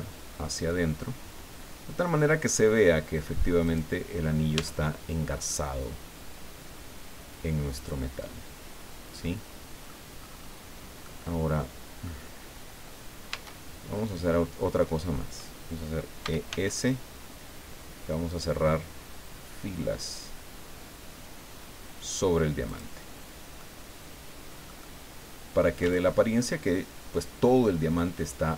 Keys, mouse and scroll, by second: 3.6 click, 4.2 scroll down 1, 4.6 Tab, 5.0-5.4 scroll down 1, 5.5-10.0 drag, 10.2-10.6 scroll up 1, 10.8 scroll up 1, 11.0-12.2 drag, 13.3 Tab, 16.2 e, 16.6 s, 22.7 click, 23.1-23.5 scroll down 2, 23.6-25.8 drag, 25.8 Tab, 26.2-28.5 drag.